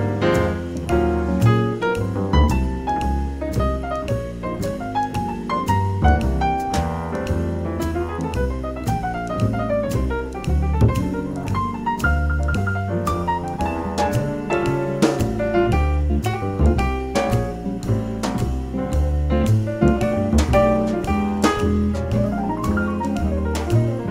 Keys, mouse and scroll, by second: 1.7-3.0 drag, 4.6-11.7 drag, 11.9-14.6 middle drag, 13.1-15.0 drag, 15.1-18.3 drag, 20.5-22.3 drag, 22.1-24.1 middle drag, 23.0-24.1 drag.